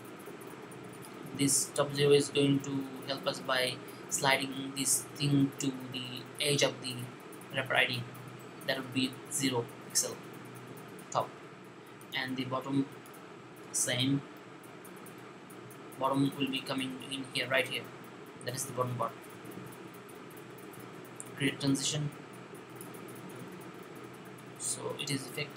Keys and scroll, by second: 1.2 typing, 14.2 typing.